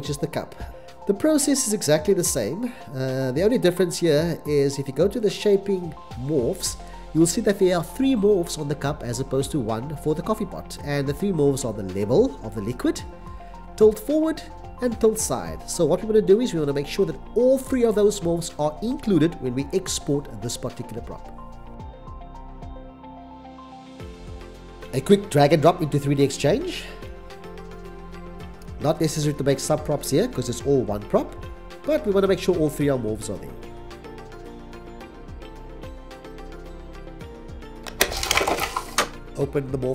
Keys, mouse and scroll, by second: 0.7 x, 29.0 c, 29.3 c, 29.8 x, 30.1 c, 38.7 x, 38.9 c, 39.0 x.